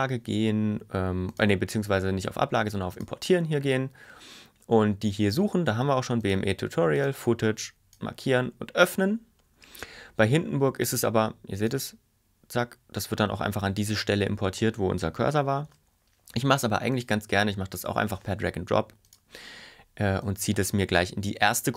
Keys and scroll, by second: 15.8 super+y.